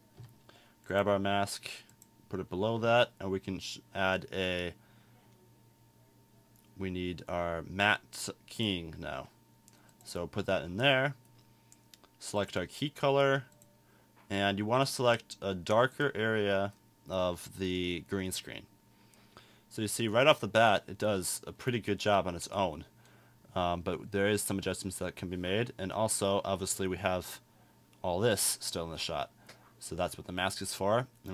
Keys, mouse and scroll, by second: 17.9 right click, 26.7 right click, 27.2-27.9 drag.